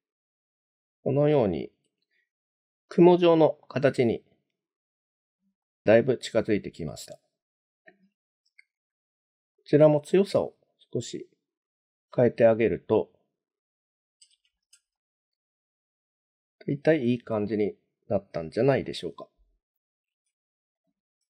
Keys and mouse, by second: 2.2 shift+middle click, 3.7-5.1 middle drag, 5.6-6.2 middle drag, 8.9-11.9 drag, 12.6-14.1 middle drag, 14.5 shift+middle drag, 15.0-17.0 middle drag, 17.3-18.7 middle drag, 20.8-21.2 drag.